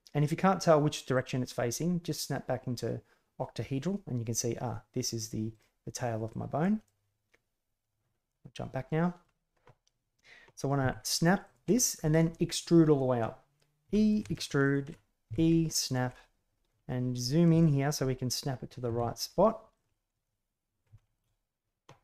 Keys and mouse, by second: 1.1-2.0 drag, 5.1 right click, 5.5 right click, 6.3 click, 6.8-8.2 drag, 8.8 middle click, 10.7 g, 11.7 middle click, 15.2 e, 16.1 middle click, 17.5 shift+middle click, 19.2 e, 20.2-20.8 middle drag, 20.9 shift+middle click.